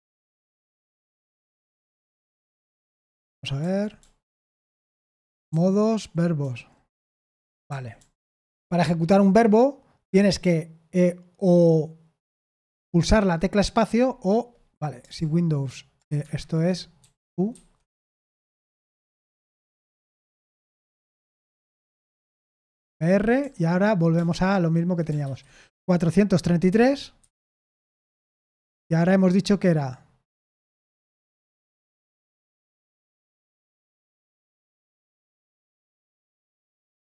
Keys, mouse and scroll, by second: 1.1 j, 2.0 j, 3.5 Down, 3.9 Down, 4.6-5.0 Down, 5.2 Down, 5.4 Down, 6.3 Down, 6.8 Down, 7.6 Down, 7.9 Down, 8.1 Down, 8.3 Down, 16.1 Escape, 16.9-21.5 typing, 22.3 ctrl+p, 22.8 Return, 23.3 j, 24.1 BackSpace, 25.2 shift+/, 26.6-27.3 typing, 34.0-37.1 typing.